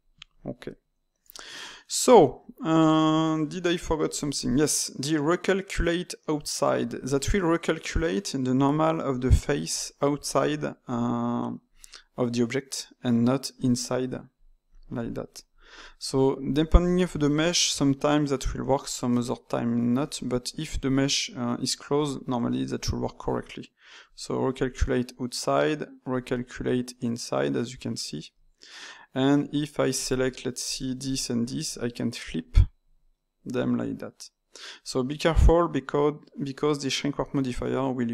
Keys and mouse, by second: 0.8 Tab, 1.3-2.8 ctrl+shift+middle drag, 2.8 Tab, 3.5-6.4 ctrl+middle drag, 7.1-8.6 middle drag, 8.6 d, 9.0 click, 9.4 d, 9.6 click, 10.2 d, 12.6-13.8 middle drag, 13.8 d, 14.3 click, 14.6 d, 14.6 click, 14.9 d, 15.3-17.6 right drag, 17.6 d, 17.8-24.0 middle drag, 24.0-25.0 drag, 25.0-26.0 middle drag, 26.0 click, 26.6-28.2 middle drag, 28.2-29.4 drag, 29.4 a, 30.6 click, 31.0 ctrl+shift+click, 32.2 click, 33.1 middle click, 33.8 ctrl+z, 35.3-38.1 ctrl+middle drag.